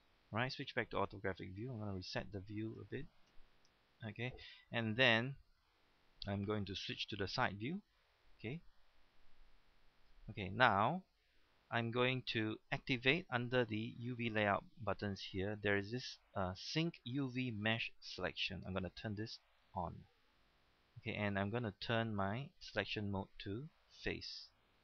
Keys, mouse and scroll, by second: 0.1-0.8 scroll up 1, 3.3 KP_Decimal, 7.4 KP_3, 19.4 click.